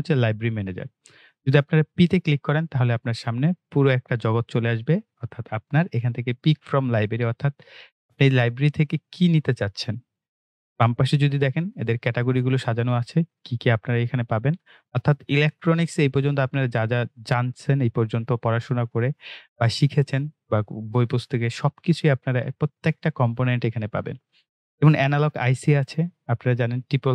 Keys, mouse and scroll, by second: 2.2 click, 11.9-14.2 drag, 14.2 scroll up 1, 17.0-18.8 scroll down 1, 18.8-19.4 scroll up 1, 19.9-21.6 scroll down 1, 21.6-23.5 scroll up 2, 25.4 click.